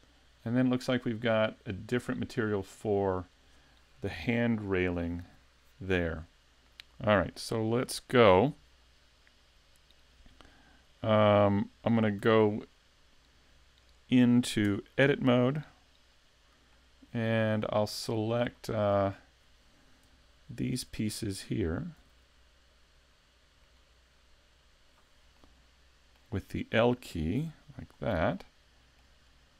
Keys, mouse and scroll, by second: 7.4 shift+middle click, 7.9-9.7 shift+scroll down 1, 12.3 a, 13.8 right click, 14.7 Tab, 16.7 middle click, 17.6 shift+middle click, 18.3-18.6 scroll up 2, 18.6 shift+middle click, 20.1 l, 20.9 l, 22.0 l, 23.6 l, 24.6 l, 25.4 middle click, 27.4 l, 27.9-28.4 scroll up 2, 28.4 middle click, 29.2 scroll down 3.